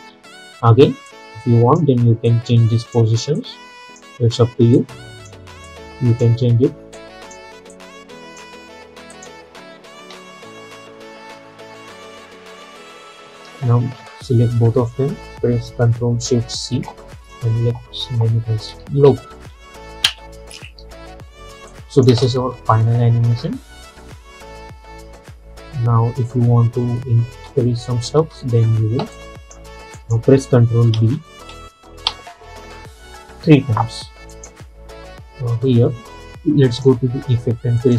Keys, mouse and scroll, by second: 0.1 scroll up 1, 0.7 scroll up 1, 1.2-9.2 drag, 10.1 space, 12.6 space, 14.1 ctrl+a, 16.6 ctrl+shift+c, 18.6-19.8 typing, 20.1 Return, 21.8 click, 22.2 space, 26.9 space, 29.2 click, 31.0 ctrl+d, 34.4 click.